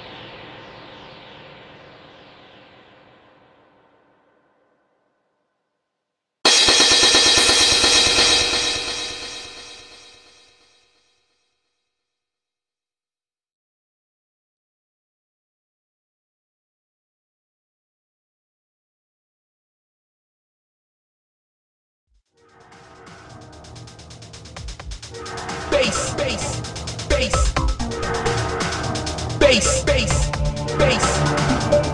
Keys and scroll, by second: 2.0 alt+space, 2.4 alt+space, 3.1 alt+space, 3.7 ctrl+z, 4.8 alt+space, 5.7 alt+space, 6.5 alt+space, 8.2 alt+space, 8.8 alt+space, 9.2 alt+space, 9.7 ctrl+z, 10.3 alt+space, 11.1 ctrl+z, 11.2 alt+space, 11.8 alt+space, 12.3 ctrl+z, 13.1 alt+space, 14.2 alt+space, 15.2 alt+space, 15.9 alt+space, 16.8 ctrl+z, 18.7 alt+space, 20.5 ctrl+z, 23.7 ctrl+z, 24.0 ctrl+z, 26.1 ctrl+z, 27.8 ctrl+z, 30.9 alt+space, 31.2 alt+space.